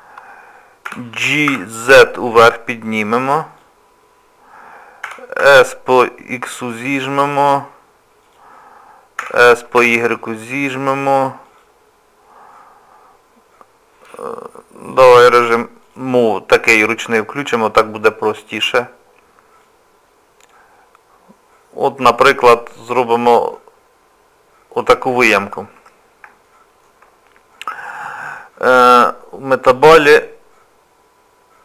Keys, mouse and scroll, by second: 0.9 g, 5.1 s, 9.2 s, 15.8 click, 17.4 click, 19.6 click, 26.5 shift+middle click, 29.2-31.6 scroll down 2.